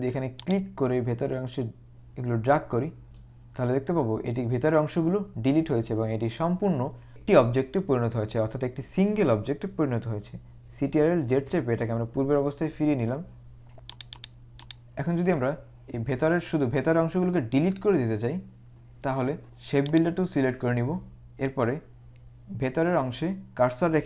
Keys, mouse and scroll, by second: 0.5 click, 11.3 ctrl+z, 14.4 click, 20.0 click.